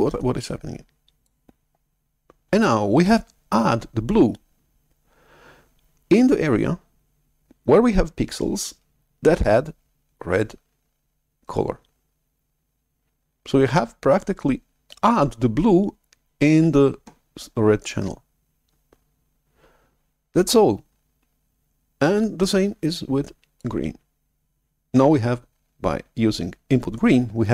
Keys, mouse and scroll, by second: 22.4-26.0 drag.